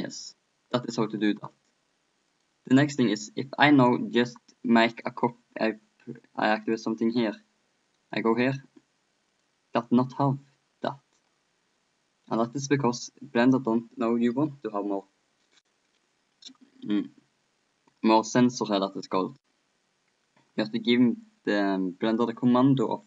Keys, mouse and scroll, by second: 2.3 middle click, 2.9 middle click, 5.0-6.2 middle drag, 6.2 click, 8.1-9.9 right drag, 9.3-11.2 drag, 12.3-13.7 right drag, 13.4 click, 14.0-15.3 drag, 22.2 click.